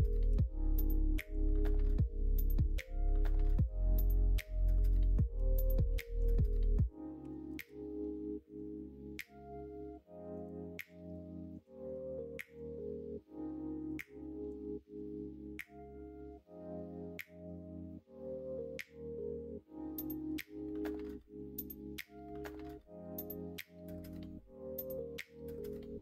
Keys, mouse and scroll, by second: 5.8 s, 10.8 2, 13.8 click.